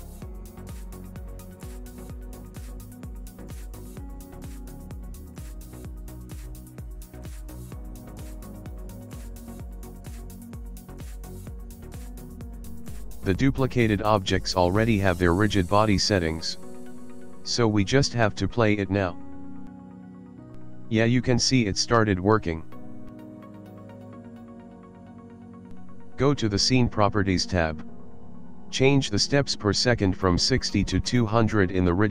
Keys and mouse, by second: 0.2 middle click, 1.1 middle click, 1.2 shift+middle click, 1.6 ctrl+middle click, 2.2 middle click, 2.6 ctrl+middle click, 3.4 middle click, 4.4 g, 5.1 middle click, 6.9 middle click, 8.0 middle click, 9.1 click, 9.7 click, 10.8 click, 12.6 click, 15.9 click, 18.1 middle click, 19.2 click, 20.1 click, 21.7 middle click, 23.8 click, 24.6 click, 25.6 click, 26.9 click, 27.8 click, 29.6 click, 31.3 KP_0.